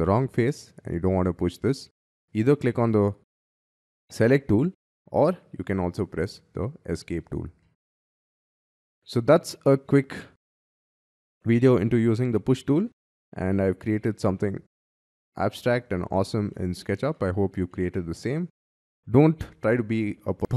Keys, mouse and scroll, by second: 5.5 p, 6.9 Escape, 7.4 middle click, 7.8 space, 8.5 Escape, 8.7 Escape, 9.0-9.4 scroll down 8, 9.6 scroll up 5, 9.8 middle click, 10.4 middle click, 11.6-12.0 scroll down 5, 12.0 scroll up 5, 13.1 shift+scroll down 3, 13.4 middle click, 15.4 middle click, 15.8 middle click, 16.4 middle click, 17.1 middle click, 17.6 middle click.